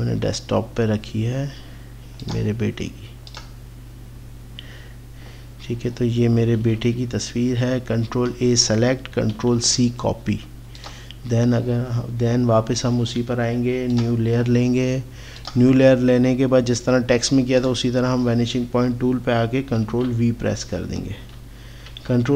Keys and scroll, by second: 9.3 c, 19.9 ctrl+v, 21.9 ctrl+t.